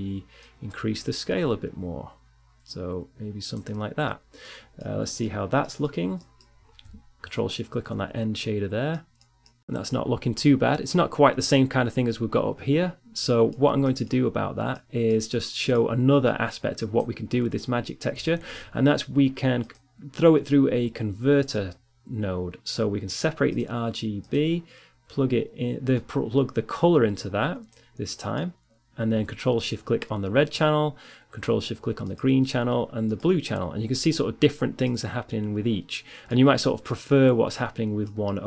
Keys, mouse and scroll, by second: 2.7-7.0 middle drag, 7.0-9.6 drag, 11.2 click, 14.5-16.4 drag, 16.6 shift+a, 25.4 click, 26.7 middle click, 28.0 middle click, 28.4-30.4 drag, 31.2-34.6 drag, 34.6 middle click, 36.7 middle click.